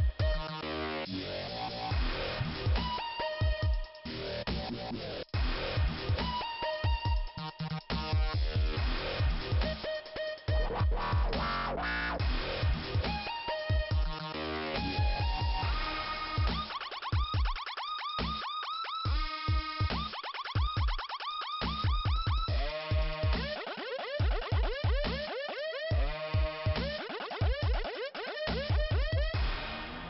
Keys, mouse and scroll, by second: 2.0 click, 2.2 click, 10.6 click, 10.9 click, 12.7 click, 13.3 click, 13.6 click, 13.7 click, 14.4 right click, 16.3 click, 17.4 click, 17.9 click, 19.1 click, 21.1 click, 23.2 click, 23.7 click, 24.7 click, 24.9 click, 25.4 scroll up 2, 27.0 click, 27.5 click, 28.9 click.